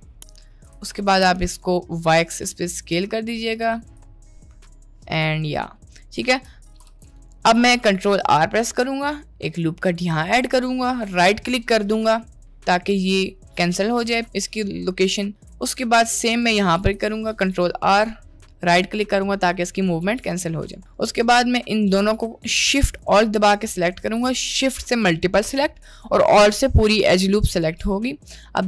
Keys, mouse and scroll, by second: 0.7 s, 4.2-4.9 middle drag, 5.9 middle click, 6.9 Tab, 7.8 middle click, 8.4 ctrl+r, 13.8 middle click, 15.5 ctrl+e, 16.8 ctrl+r, 20.1 middle click, 20.8 middle click, 27.6-28.6 middle drag.